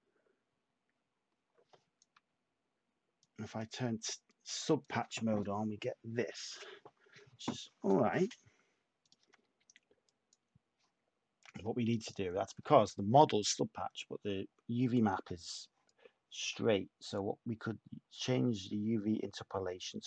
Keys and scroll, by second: 2.1 Tab, 6.5 Tab, 6.8 Tab.